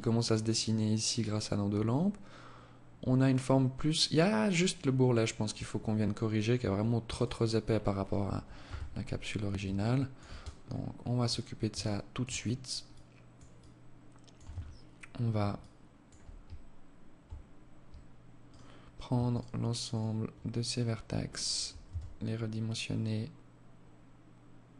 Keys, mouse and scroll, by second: 5.8 Escape, 6.4 right click, 8.0 KP_1, 8.6-9.0 scroll down 1, 9.0 alt+shift+click, 9.6 scroll up 3, 9.8-10.1 scroll down 2, 10.0-10.7 scroll up 8, 11.0 alt+shift+click, 11.6-12.0 scroll up 2, 12.1 alt+click, 12.8 alt+click, 13.7 Tab, 14.8 alt+click, 17.6 alt+right click, 18.5 alt+shift+right click, 19.1 alt+shift+right click, 20.5 alt+shift+right click, 21.0 s.